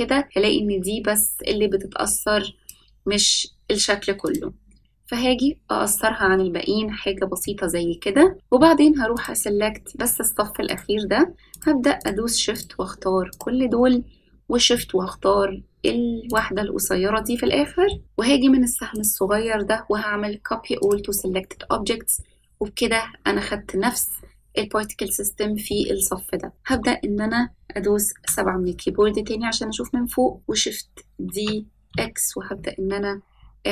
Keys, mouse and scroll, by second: 4.2-7.4 drag, 7.4-8.3 middle drag, 9.1 click, 10.6 shift+click, 11.5 shift+click, 11.9 shift+click, 12.5 shift+click, 13.3 shift+click, 16.2 shift+click, 17.4 middle click, 18.9-20.9 drag, 25.7-26.7 middle drag, 28.1 KP_7, 31.2 shift+d.